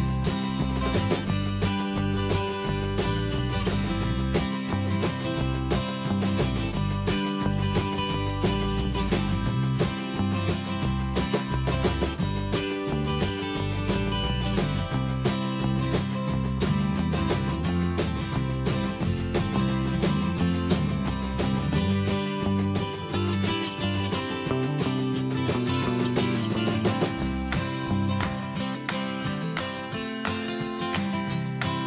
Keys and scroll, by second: 6.3 Return, 15.6 ctrl+[.